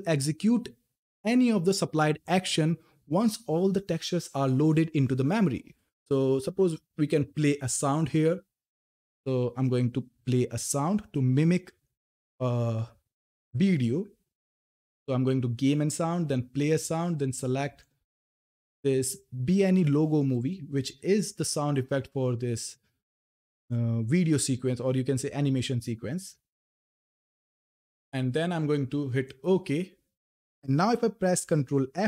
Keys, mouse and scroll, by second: 9.8 click, 16.1 click, 19.9 click, 26.7 click, 29.0 click.